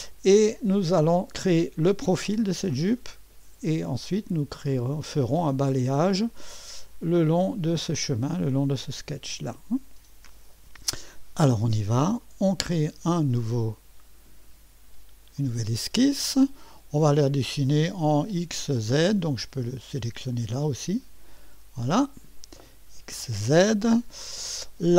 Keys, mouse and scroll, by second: 0.0-0.9 scroll up 1, 4.6 middle click, 4.7-5.1 scroll down 1, 5.1 click, 6.4 click, 12.2-13.4 drag, 15.4 click, 20.3 click, 21.9 click.